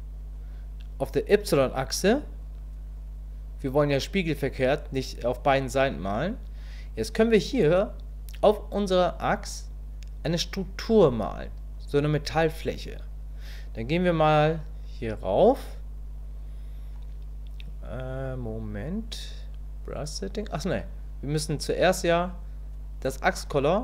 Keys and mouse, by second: 2.1 click.